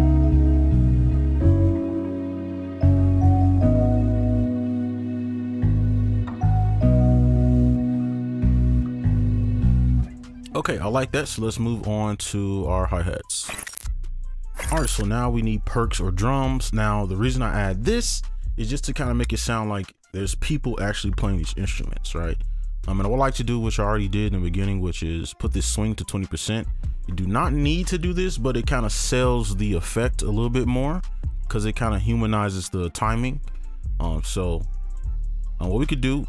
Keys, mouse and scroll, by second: 4.1 ctrl+click, 4.7 ctrl+click, 5.4 shift+click, 6.1 shift+right click, 8.4 ctrl+a, 8.6 alt+scroll down 1, 8.8 right click.